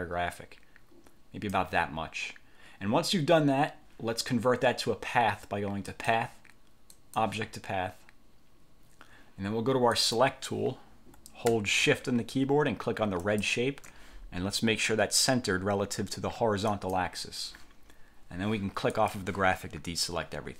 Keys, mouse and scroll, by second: 6.0 click, 7.0 click, 10.0 click, 13.3 shift+click, 16.8 click, 19.0 click.